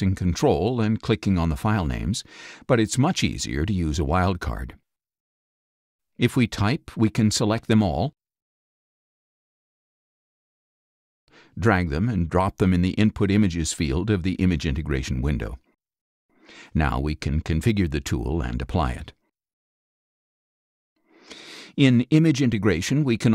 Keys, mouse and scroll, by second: 0.2 ctrl+scroll up 2, 4.0 click, 4.1-4.4 scroll up 2, 6.5 shift+r, 9.5-10.8 drag, 11.0-14.4 drag, 15.2 click, 22.3 click, 22.9 click.